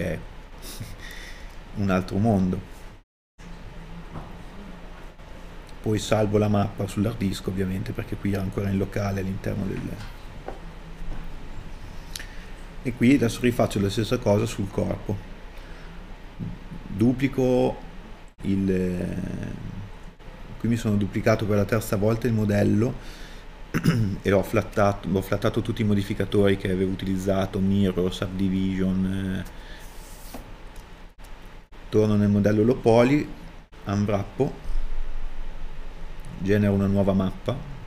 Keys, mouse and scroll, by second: 10.8 click, 11.2 Return, 13.1-16.0 drag, 13.7 Return, 17.7 KP_Divide, 19.3 scroll up 1, 19.9 Tab, 20.0-37.8 drag.